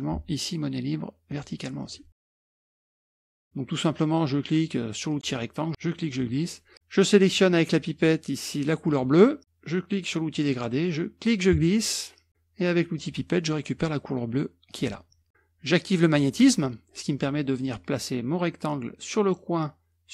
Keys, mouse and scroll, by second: 1.3 click, 1.8 click, 2.2 KP_Subtract, 2.5-5.2 middle drag, 5.2-6.5 drag, 7.3 click, 8.9 click, 10.3 click, 11.2-12.3 drag, 13.0 click, 14.7 click, 15.3 click, 16.2 click, 17.6-20.1 drag.